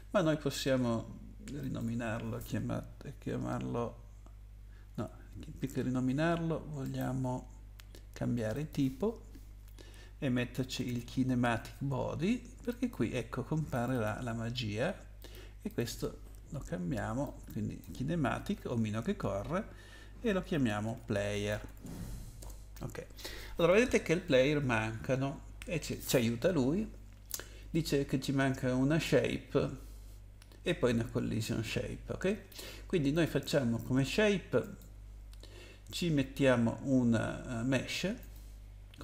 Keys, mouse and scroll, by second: 1.6 click, 4.9 Escape, 6.8 right click, 8.5 click, 10.3-11.4 typing, 12.7 click, 13.7 click, 13.8 click, 13.9 click, 14.0 double click, 15.2 double click, 15.7 click, 15.8 double click, 15.8 double click, 17.2 double click, 20.6-22.3 typing, 22.4 Return, 33.1 click, 34.6 click, 38.2 click.